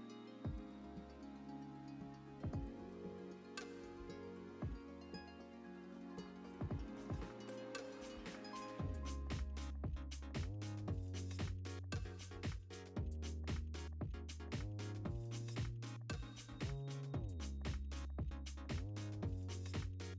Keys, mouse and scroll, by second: 0.0 click, 0.2-2.7 typing, 1.5 scroll up 2, 2.3 click, 3.4 click, 3.8 Tab, 3.8 ctrl+r, 4.6 g, 6.4 ctrl+b, 7.7 click, 7.8 g, 9.1 click, 9.4 g, 9.8 scroll down 1, 10.1 a, 11.2-11.6 scroll down 1, 11.6 KP_7, 11.8 Tab, 11.9 click, 12.2 h, 12.4 scroll down 1, 12.6 click, 12.7 Tab, 13.5 alt+click, 14.6 x, 15.0 alt+click, 15.3 shift+d, 16.5 click, 16.6 `, 16.8 scroll up 1, 16.9 2, 17.1 alt+shift+click, 17.8 right click, 18.0 `, 18.3 ctrl+r, 18.8 `, 19.0 1, 19.1 click, 19.4 g.